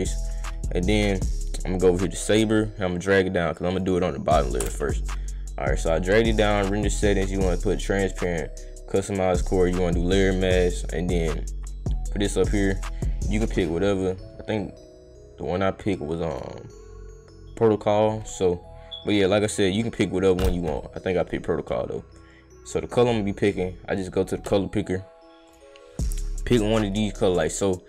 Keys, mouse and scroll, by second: 0.0-0.3 drag, 2.3-3.8 drag, 5.7 click, 6.9 click, 7.4 click, 8.2 click, 9.0 click, 9.4 click, 10.1 click, 16.3 click, 22.9 click, 25.5 click, 27.6-27.8 drag.